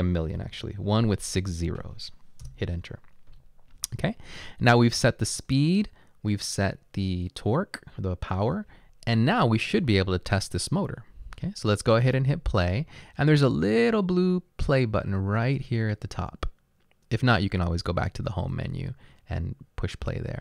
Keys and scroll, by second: 0.4 typing, 2.6 Return.